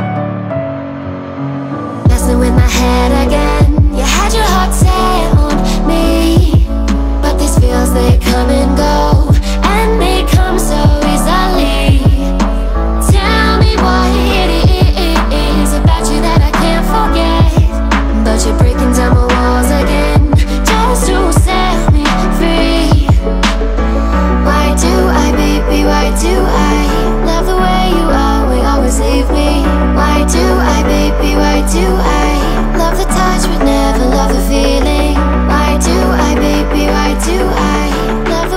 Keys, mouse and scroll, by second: 0.3-3.8 drag, 3.8 x, 17.2 click, 22.7 click, 24.9 click, 33.7 click, 35.7 click.